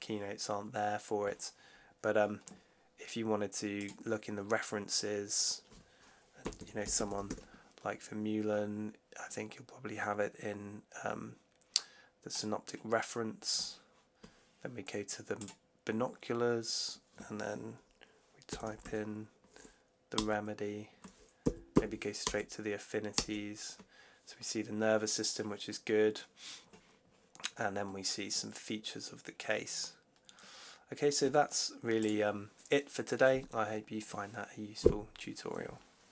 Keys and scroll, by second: 6.1-7.6 typing, 18.2-19.2 typing, 20.0 Return, 21.3 Down, 22.1 Return, 23.0 Return.